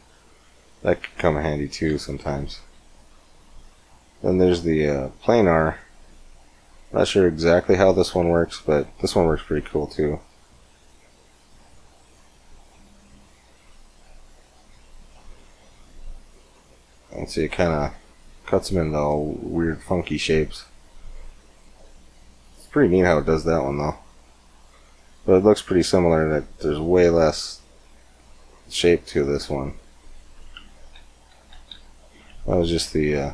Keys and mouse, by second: 1.1 ctrl+z, 1.7 ctrl+z, 3.6 click, 4.8 click, 5.8-8.6 middle drag, 8.8 middle click, 9.0-14.9 drag, 14.9 Tab, 18.7-20.6 middle drag, 23.1 middle click, 23.6 Tab, 26.1 Tab, 29.7 Tab, 30.6 ctrl+z, 31.2 ctrl+z, 31.6 ctrl+z.